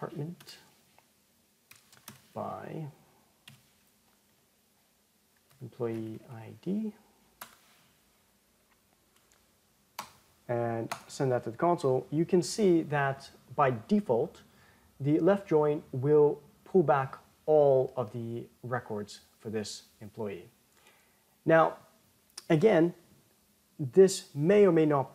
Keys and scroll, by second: 7.3 Tab, 11.2 ctrl+Return.